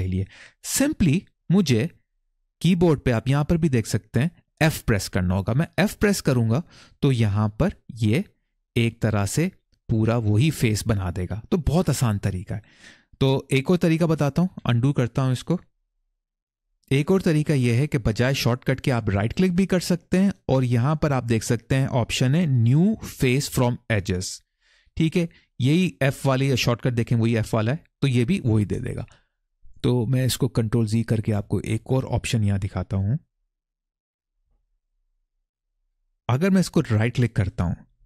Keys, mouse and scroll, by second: 5.6 f, 8.8 middle click, 13.0 middle click, 14.4 ctrl+z, 18.9-27.4 right drag, 31.5 ctrl+z, 37.0-38.0 right drag.